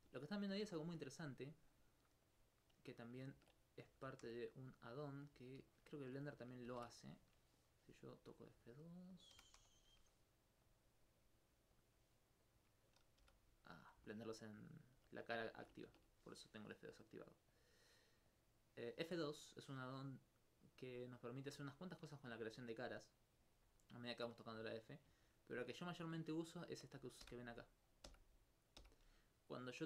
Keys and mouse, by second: 0.2 shift+right click, 1.3 click, 2.3 click, 3.3 ctrl+z, 3.9 ctrl+g, 5.5 alt+click, 5.6 alt+s, 8.3 click, 9.3 f, 9.6 2, 10.7 click, 12.9 right click, 14.1 alt+click, 14.6 alt+click, 15.5 alt+click, 15.9 ctrl+z, 17.5 click, 21.8 alt+click, 24.1 alt+click, 24.6 alt+g, 25.7 shift+click, 27.7-29.8 right drag.